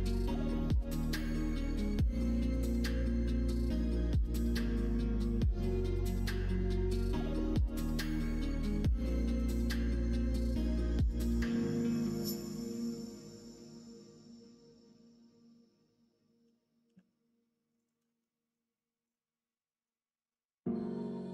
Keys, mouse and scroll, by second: 0.2 middle click, 0.7 click, 2.1 l, 3.2-5.3 drag, 5.5 scroll up 1, 5.5-6.8 middle drag, 6.8-7.3 scroll down 2, 7.2 middle click, 7.8 s, 9.3 middle click, 10.8 r, 13.1 middle click, 13.9 middle click, 15.1 ctrl+z, 15.6 ctrl+z, 16.4 r, 18.0 middle click, 19.0-21.3 drag.